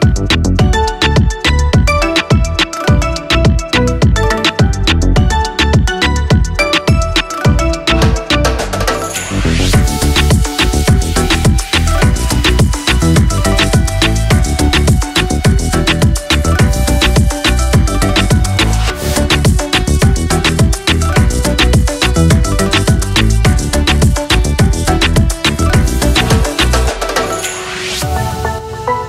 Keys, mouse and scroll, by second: 7.2 Return, 9.6 click, 11.6 ctrl+e, 12.2 click, 13.3-20.2 scroll down 1, 20.6-22.0 scroll down 1, 22.0 click, 23.0-23.9 scroll down 1, 23.9-24.4 scroll up 1, 24.4-27.4 scroll down 1, 27.4-28.3 scroll up 1.